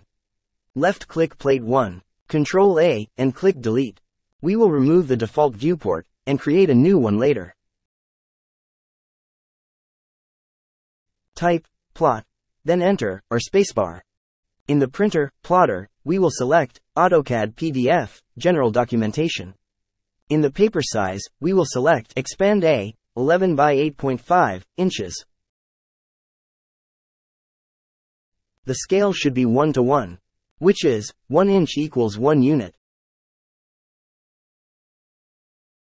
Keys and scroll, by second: 0.1 1, 1.3 Return, 6.0 ctrl+a, 7.7 Delete, 9.6-11.0 typing, 11.9 Return.